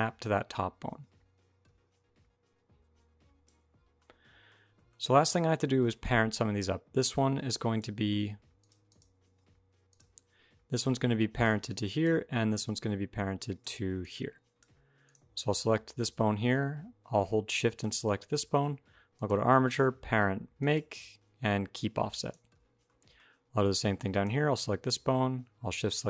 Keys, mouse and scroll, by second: 3.8 middle click, 4.4 scroll up 1, 4.6 shift+middle click, 5.0 middle click, 5.4 shift+middle click, 6.7 middle click, 6.7 d, 6.8 click, 7.6 d, 8.4 click, 8.7 click, 9.7 click, 10.2-14.4 typing, 10.6 click, 11.5 click, 12.4 click, 13.8 click, 14.8 click, 15.3 click, 17.6 shift+click, 18.9 click, 22.9 shift+middle click, 23.0-23.9 scroll up 2, 23.9 click, 23.9 scroll up 1, 25.6 shift+click.